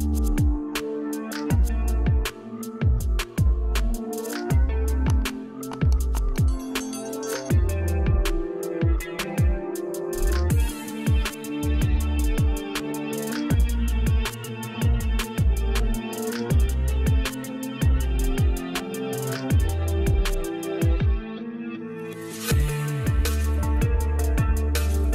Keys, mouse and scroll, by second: 3.9-19.3 drag, 21.2 click, 23.7-25.1 drag.